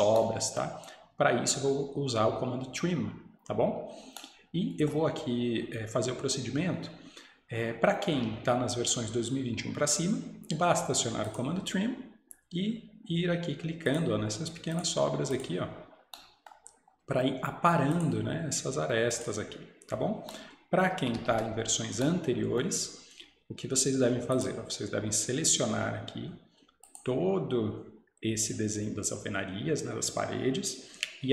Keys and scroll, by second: 21.2 Escape, 21.4 Escape.